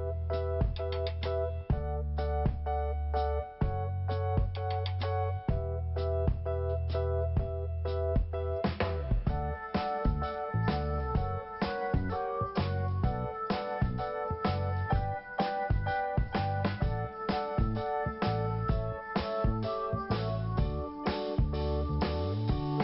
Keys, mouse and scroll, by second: 0.8 click, 1.3 click, 1.4 double click, 2.5 scroll down 1, 3.2-3.7 scroll up 2, 5.2 click, 6.9 click, 10.9 click, 11.7 click, 16.4 scroll down 1, 17.0 click, 17.8 scroll down 1, 18.6 click, 20.2 i, 21.0 scroll up 1, 21.9 click.